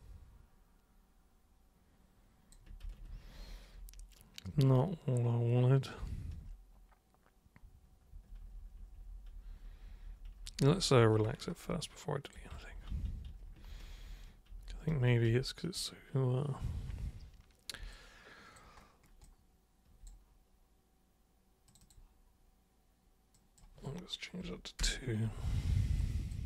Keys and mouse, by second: 2.8 ctrl+super+z, 3.1 ctrl+super+z, 3.3 ctrl+super+z, 3.8 ctrl+super+z, 4.5 ctrl+super+z, 6.3 ctrl+super+z, 8.1 ctrl+super+z, 8.4 ctrl+super+z, 8.9 ctrl+super+z, 9.1 ctrl+super+z, 9.5 ctrl+super+z, 9.7 ctrl+super+z, 10.4 ctrl+super+z, 10.6 ctrl+super+z, 11.0 ctrl+super+z, 11.8 alt+super+click, 12.6 ctrl+super+z, 12.9 ctrl+super+z, 13.0 ctrl+super+z, 13.3 ctrl+super+z, 13.7 ctrl+super+z, 13.9 ctrl+super+z, 14.0 ctrl+super+z, 14.5 ctrl+super+z, 15.2 ctrl+super+z, 17.9 alt+super+click, 19.2 alt+super+click, 21.7 super+click, 23.3 super+click, 24.7 super+Return, 26.0 alt+super+click.